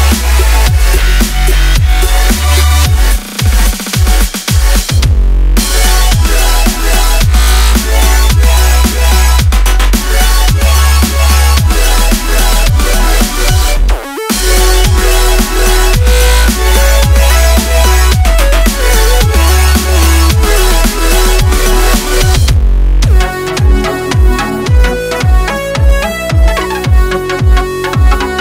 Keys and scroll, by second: 0.0-1.4 typing, 2.5 a, 4.1 p, 4.3 Escape, 7.5 p, 7.7 Home, 10.7 shift+a, 14.2-15.7 typing, 16.2 shift+Tab, 19.2 shift+z, 20.1 a, 24.1 a, 24.6 a, 27.2-28.4 typing.